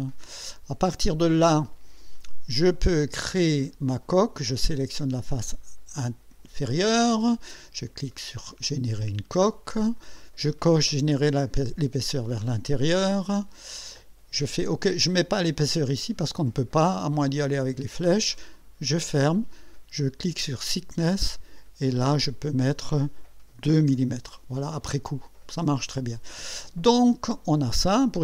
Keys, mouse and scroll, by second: 1.6 click, 3.0 right click, 4.9 click, 8.3 click, 9.5 click, 11.6 click, 13.0 click, 18.6 click, 20.5 click, 22.3 click, 23.6 2, 23.9 Return, 27.2 click.